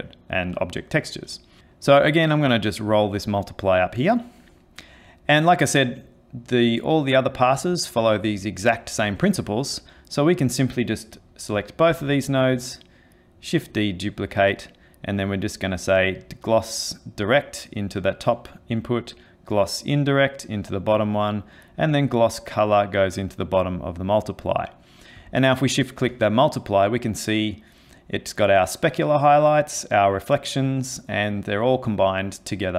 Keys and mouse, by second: 2.7 click, 3.3 click, 9.4 click, 11.9 shift+d, 13.7 click, 15.1 click, 18.8 click, 21.9 click, 25.7 ctrl+shift+click.